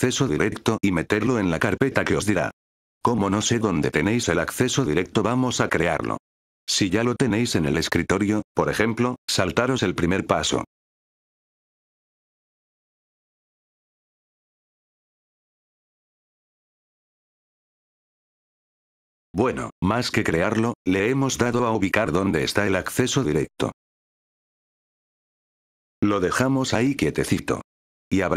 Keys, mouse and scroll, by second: 1.9 click, 3.7 click, 12.2 right click, 15.5 click, 18.6 F8, 18.9 click, 24.2 F8, 25.9 click.